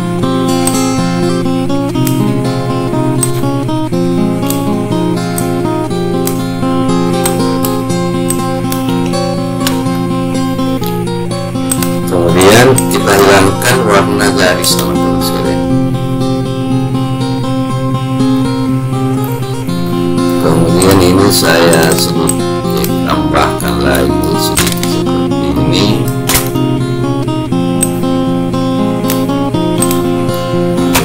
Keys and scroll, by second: 19.5 ctrl+v.